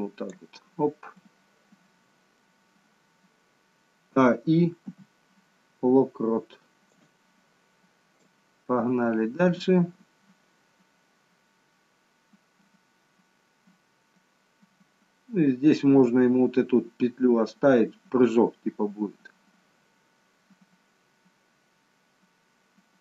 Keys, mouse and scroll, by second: 1.3 middle click, 4.3-4.9 a, 4.9 i, 8.3 click.